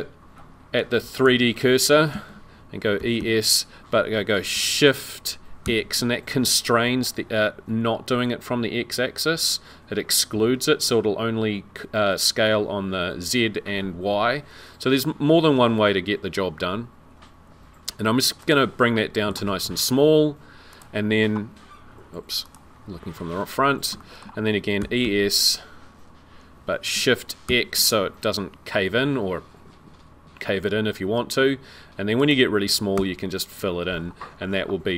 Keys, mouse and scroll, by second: 2.1 super+z, 3.1 e, 18.8 middle click, 20.7 click, 22.4 click, 23.2-23.7 scroll up 6, 24.0 shift+middle click, 24.8 e, 33.9-34.7 scroll down 12, 33.9 f.